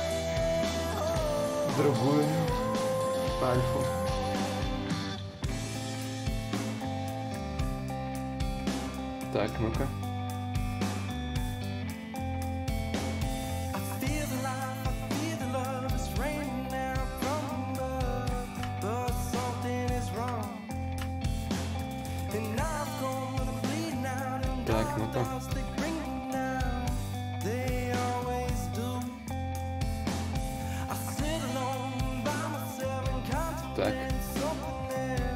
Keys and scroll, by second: 8.0 ctrl+y, 8.0 ctrl+z, 21.1 ctrl+z, 21.4 ctrl+z, 21.9 ctrl+z, 22.6 ctrl+z, 24.1 space.